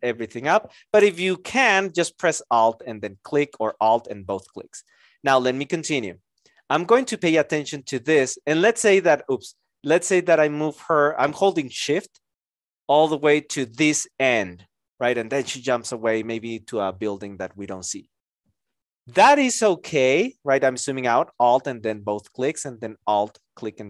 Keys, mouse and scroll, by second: 3.9 alt+click, 8.3 shift+click, 9.3 ctrl+z, 10.5 shift+click, 19.9 alt+click, 21.6 alt+click.